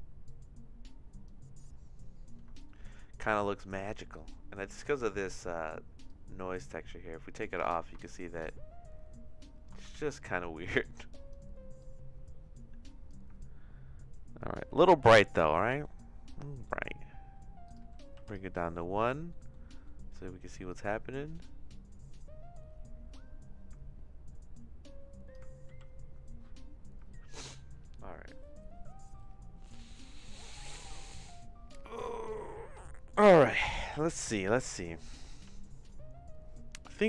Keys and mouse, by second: 0.2-1.3 drag, 2.6 shift+middle click, 4.9 middle click, 6.1-7.4 drag, 8.0-9.6 shift+middle drag, 9.9 ctrl+z, 10.8 click, 11.8-13.1 drag, 15.1 middle click, 15.7 middle click, 17.6 click, 19.0 middle click, 19.5 middle click, 20.0 middle click, 20.7-25.3 drag, 25.8 ctrl+z.